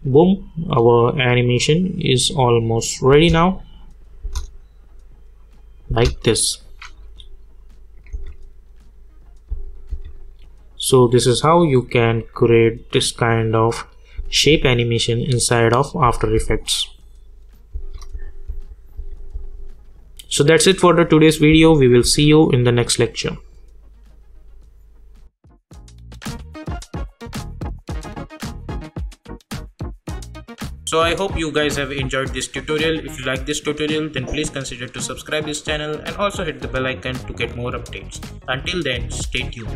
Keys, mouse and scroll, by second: 3.1 space, 3.8 click, 4.2 space, 6.5 click, 8.1 space, 14.2 space, 21.5 space, 23.3 click.